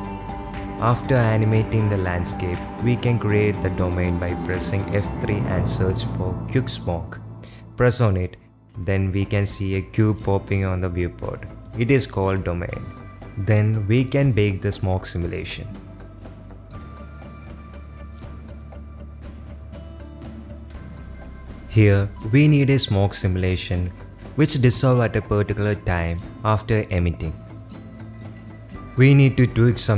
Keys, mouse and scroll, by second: 1.6 space, 2.3 click, 3.3 F3, 5.9 shift+drag, 6.4-10.6 typing, 7.8 click, 12.1 click, 16.2 g, 18.1-19.3 drag, 19.7-21.2 drag, 21.5 middle drag, 21.7 middle drag, 22.1 middle click, 22.8 space, 23.3 space, 23.8 shift+Left, 24.3 space, 27.5 space, 27.9 ctrl+s, 29.4 click, 29.7 click.